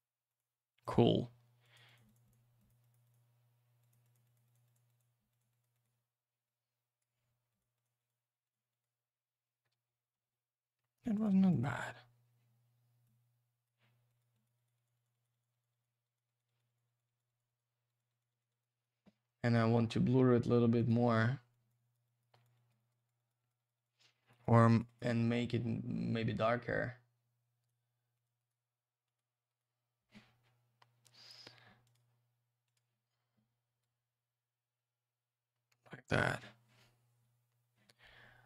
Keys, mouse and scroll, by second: 0.3 click, 0.4 click, 0.7 click, 0.8 double click, 1.6 click, 1.7 click, 1.9 click, 1.9 double click, 2.1 click, 2.1 click, 2.2 click, 2.3 double click, 2.6 click, 2.7 click, 2.8 click, 2.9 double click, 3.0 click, 3.1 click, 3.8 click, 3.9 click, 4.0 click, 4.1 click, 4.2 click, 4.3 double click, 4.4 click, 4.5 click, 4.6 click, 4.7 double click, 4.9 click, 5.0 click, 5.3 click, 5.4 double click, 5.5 click, 5.6 click, 5.7 click, 5.8 double click, 6.4 click, 7.6 click, 7.7 click, 7.8 double click, 8.0 click, 8.1 click, 8.4 click, 8.5 double click, 8.7 click, 8.8 click, 9.7 ctrl+z, 11.1 click, 11.2 click, 11.5 click, 11.6 click, 13.0 click, 14.2 click, 14.3 click, 14.4 double click, 14.6 click, 14.7 click, 14.7 click, 14.8 double click, 14.9 click, 15.0 click, 15.1 click, 15.2 double click, 15.3 click, 15.4 click, 15.5 click, 15.6 double click, 15.7 click, 15.8 click, 16.0 click, 16.1 double click, 16.3 click, 16.4 click, 16.5 click, 16.6 double click, 16.7 click, 16.7 click, 16.9 click, 17.0 double click, 17.0 click, 17.2 click, 17.3 click, 17.4 double click, 17.5 click, 17.6 click, 17.9 click, 18.0 double click, 18.1 click, 18.2 click, 18.3 click, 18.4 double click, 18.5 click, 18.6 click, 18.7 click, 18.8 double click, 18.9 click, 20.8 click, 20.9 click, 21.5 click, 21.7 click, 21.7 click, 21.9 double click, 22.0 click, 22.2 click, 22.3 click, 22.4 double click, 22.5 click, 22.7 click, 22.8 click, 22.9 double click, 23.0 click, 23.1 click, 23.2 click, 23.3 double click, 23.4 click, 23.5 click, 23.6 click, 23.7 double click, 23.7 click, 23.8 click, 23.9 click, 24.0 double click, 24.1 click, 24.2 click, 24.3 click, 24.4 double click, 24.5 click, 24.6 click, 24.7 click, 24.8 double click, 24.9 click, 25.0 click, 27.6 right click, 28.1 click, 28.2 click, 28.4 right click, 28.5 double right click, 29.0 click, 29.1 click, 29.5 right click, 29.6 double right click, 31.8 click, 31.9 click, 32.6 click, 32.7 click, 33.8 click.